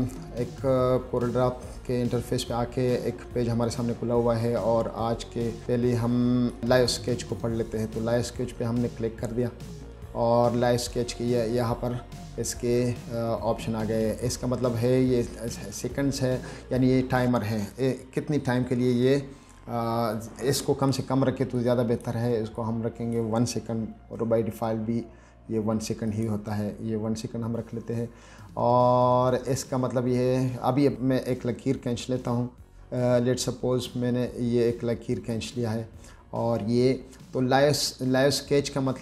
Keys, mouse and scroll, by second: 0.0-0.3 scroll up 2, 0.7-1.2 scroll down 2, 1.2-1.5 scroll up 2, 1.8-2.1 scroll down 2, 2.9 scroll up 2, 3.7-4.0 scroll down 2, 6.0 click, 9.9 click, 21.8 click, 22.8 click, 26.4 click, 33.3-35.6 drag.